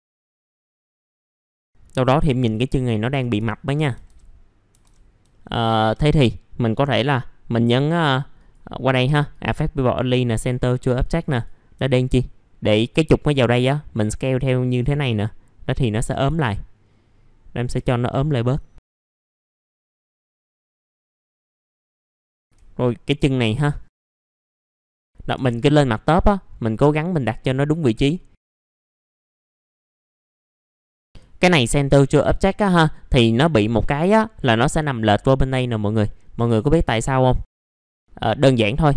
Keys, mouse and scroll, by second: 0.1-0.5 scroll up 1, 0.5 click, 1.1 F3, 1.3 alt+middle click, 2.2 scroll up 1, 2.3 alt+middle click, 5.3 alt+middle click, 8.3 click, 11.8 alt+middle click, 13.3-16.0 drag, 16.0 typing, 16.9-17.4 scroll down 1, 18.1 middle click, 18.3 scroll down 1, 18.9 F4, 19.4 alt+middle click, 19.7 scroll down 1, 19.8 alt+middle click, 20.1 scroll up 1, 21.3 middle click, 21.8 click, 22.0 middle click, 22.2 scroll down 1, 23.9 click, 24.8 middle click, 25.3 F3, 25.5-26.4 scroll down 1, 26.9 middle click, 28.6-29.2 scroll up 2, 28.7 F3, 29.3 F3, 29.4 scroll down 1, 29.7 scroll up 1, 29.9 alt+middle click, 30.3 click, 31.3 alt+middle click, 31.9 scroll down 1, 32.2 alt+middle click, 33.5 F4, 36.0 middle click, 36.2 scroll down 1, 36.9-37.4 scroll down 1, 37.4 middle click, 37.5-38.9 scroll down 1.